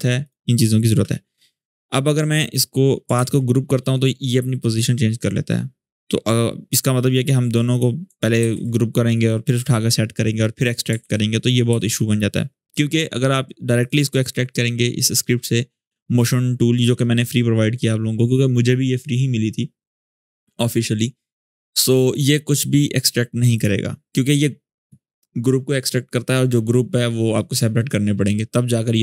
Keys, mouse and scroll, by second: 2.9 ctrl+g, 7.4 click, 8.1 ctrl+g, 10.7 ctrl+z, 13.5 click, 21.8 click.